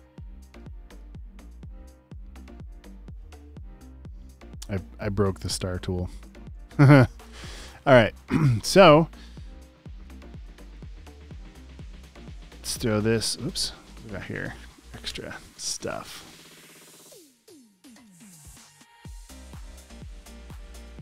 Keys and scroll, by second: 0.0-0.4 typing, 6.6 b, 10.0-10.8 typing, 11.8 BackSpace, 15.1 BackSpace, 18.0 space.